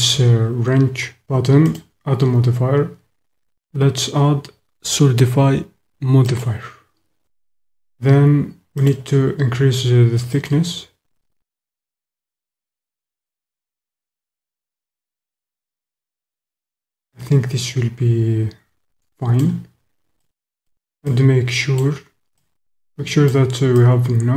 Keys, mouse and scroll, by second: 1.6-6.5 drag, 8.8 click, 10.4 click, 12.9 click, 16.9 click, 17.3 middle click, 17.5-19.5 drag, 20.2 click, 21.2 click, 22.5 click, 22.9 middle click, 23.8-24.3 drag.